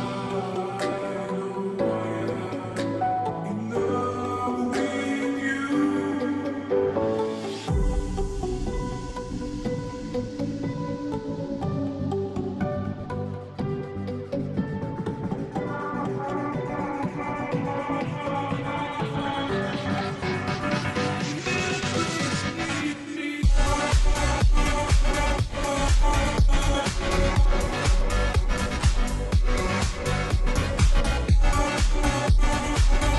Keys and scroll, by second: 25.6 space, 25.6 space, 27.2 space, 27.5-29.4 space, 30.6 space, 31.5 space, 31.6 space, 31.7-33.1 space.